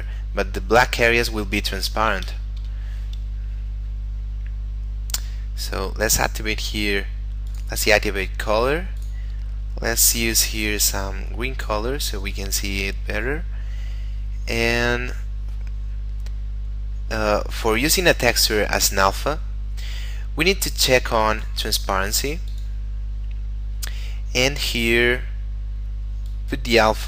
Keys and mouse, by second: 2.5 Escape, 3.3 middle click, 7.4 click, 13.7 middle click, 21.3 click, 22.9 middle click, 26.3 click.